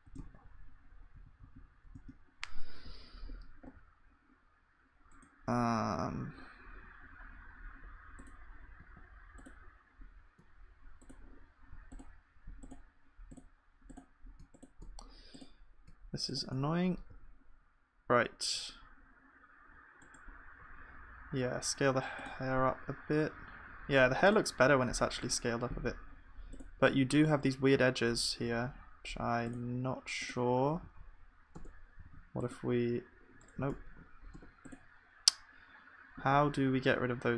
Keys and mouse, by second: 25.5-28.6 drag, 25.5-28.6 middle drag, 25.5-28.6 right drag, 28.6 ctrl+r, 31.6 Tab, 31.6-33.6 drag, 32.1 ctrl+r, 33.9 ctrl+z, 34.3 Tab, 35.4-37.1 drag.